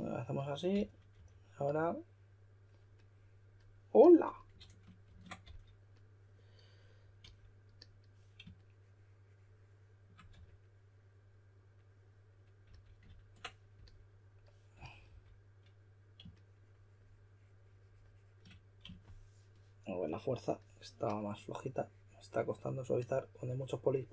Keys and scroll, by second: 0.5-1.6 typing, 4.6 super+z, 5.0 super+z, 5.4 s, 10.3 4, 12.4-13.1 typing, 13.2 super+z, 14.5-15.5 typing.